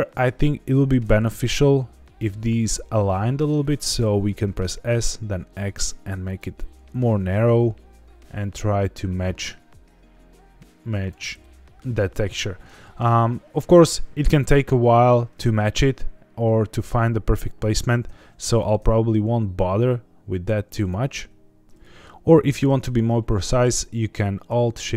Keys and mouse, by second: 1.0 g, 1.4 x, 3.6 click, 4.0 s, 4.5 x, 6.2 click, 7.0 g, 7.3 x, 11.0 click, 11.4 middle click, 12.5 middle click, 16.4-17.5 middle drag, 18.6 s, 18.8 x, 20.8 click, 20.9 g, 21.1 x, 21.6 Tab, 21.8 middle click.